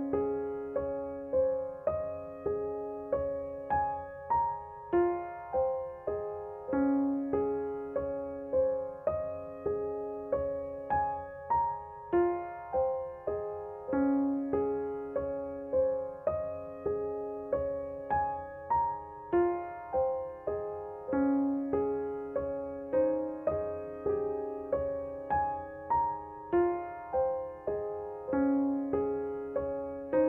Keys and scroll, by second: 2.6 ctrl+r, 9.7 Tab, 22.8 Tab, 29.2 g.